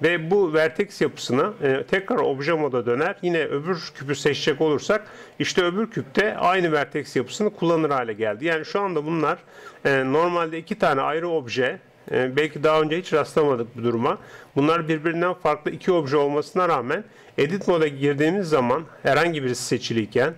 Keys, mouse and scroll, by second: 1.6 Tab, 2.2-3.7 middle drag, 3.7-6.5 right drag, 6.5 Tab, 7.8-13.1 right drag, 8.9 Tab, 13.1-15.0 middle drag, 14.6-17.8 right drag, 17.6 Tab, 18.6 Tab, 19.6 right click.